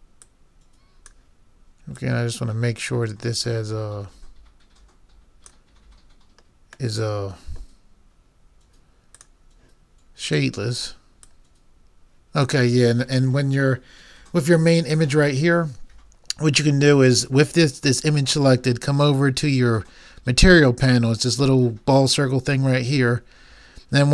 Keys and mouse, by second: 0.3-4.7 drag, 7.0-8.9 middle drag, 9.1-13.2 drag.